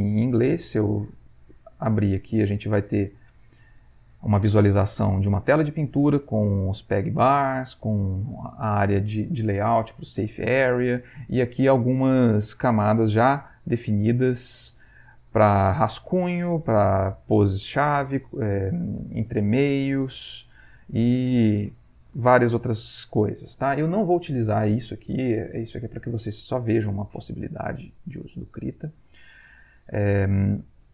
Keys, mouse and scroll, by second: 1.1 click, 5.1 middle click, 8.2 middle click, 9.0-9.4 scroll up 1, 12.4 click, 13.6-14.8 drag, 16.7-18.1 drag, 21.1-24.8 drag, 28.2 click, 29.2 click.